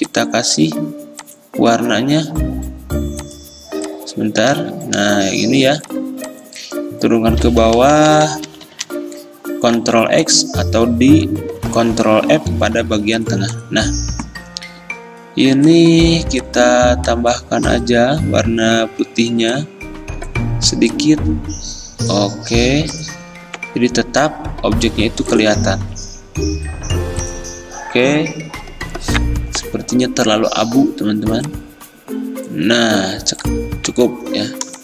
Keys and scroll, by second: 4.7 ctrl+z, 5.4 x, 7.6 ctrl+[, 7.8 ctrl+[, 7.9 ctrl+[, 8.2 ctrl+[, 9.9 ctrl+x, 12.6 ctrl+f.